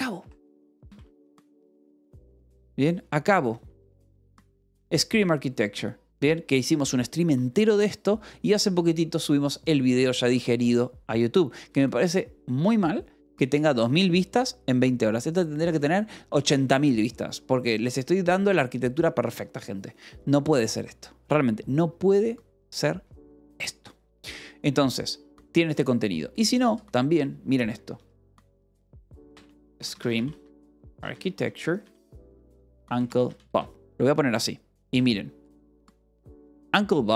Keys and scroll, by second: 0.0-2.5 typing, 27.9-33.5 typing, 34.8 f, 35.3 l.